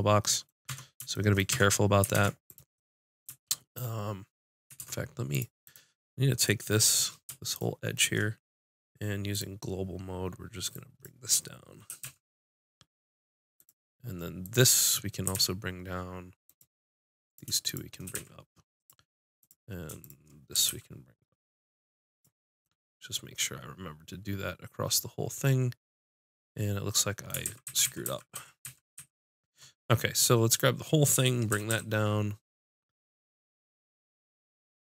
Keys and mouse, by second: 0.6 Tab, 1.5 Tab, 2.1 ctrl+Tab, 4.8 ctrl+Tab, 5.2 click, 11.9 g, 14.4 click, 14.8 click, 15.1 click, 15.2 g, 16.5-22.0 drag, 18.0 g, 20.5 g, 22.4-24.0 drag, 27.4 ctrl+z, 27.6 ctrl+z, 27.8 ctrl+z, 28.0 ctrl+z, 28.3 ctrl+z, 28.6 ctrl+z, 28.9 ctrl+z, 30.5 click, 31.5 g.